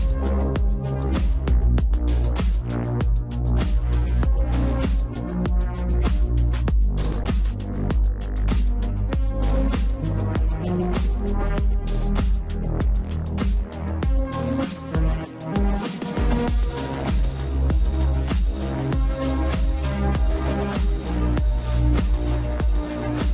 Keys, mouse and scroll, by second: 0.7 click, 3.0 shift+z, 3.5 shift+d, 4.3-5.1 scroll up 3, 4.5 shift+middle click, 5.1 g, 6.6 click, 7.4-7.8 scroll up 1, 7.8 s, 10.0 shift+z, 10.1 scroll down 1, 10.2 middle click, 10.6-11.0 scroll up 1, 11.0 g, 12.1-12.7 scroll down 5, 12.2 middle click, 12.7 middle click, 13.0 scroll up 1, 13.4 KP_1, 15.1-18.1 drag, 18.2 scroll down 4, 19.1-21.7 shift+middle drag.